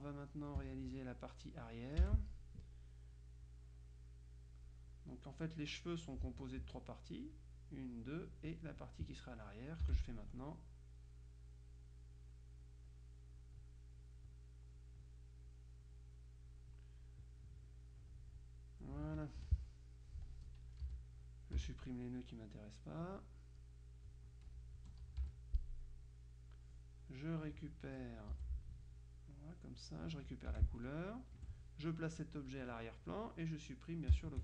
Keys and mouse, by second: 0.0 space, 2.1 F6, 3.6-5.2 drag, 6.7 F2, 6.8 click, 8.0 click, 8.9 click, 9.9 F6, 10.9 click, 12.8 click, 13.5 click, 14.9 click, 16.0 click, 19.5 F2, 19.8-22.1 drag, 21.0 Delete, 21.7 Delete, 22.3-23.6 drag, 25.4 Delete, 25.8-27.1 drag, 27.6-28.6 drag, 28.4 Delete, 29.3-30.3 drag, 30.6 F7, 30.9 click, 31.4 F1, 32.6 click, 34.3 shift+click.